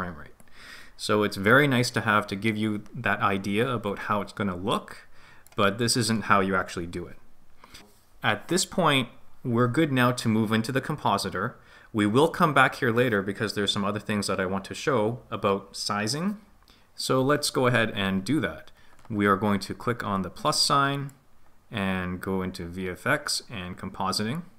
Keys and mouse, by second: 4.9-5.5 right drag, 21.0 click.